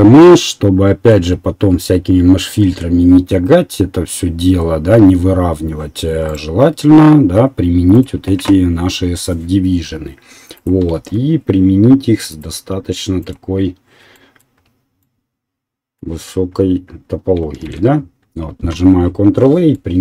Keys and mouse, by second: 6.5 click, 6.5 middle click, 8.0-10.6 middle drag, 10.6 right click, 10.9-12.3 shift+middle drag, 10.9 shift+z, 12.3-14.3 right drag, 16.7 ctrl+a, 19.9-20.0 middle drag.